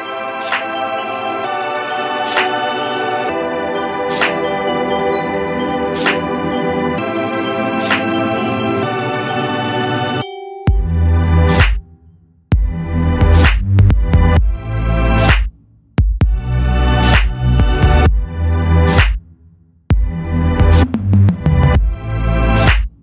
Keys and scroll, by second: 16.2 ctrl+c, 16.2 ctrl+f, 16.8 ctrl+z, 18.3 ctrl+c, 18.4 ctrl+f.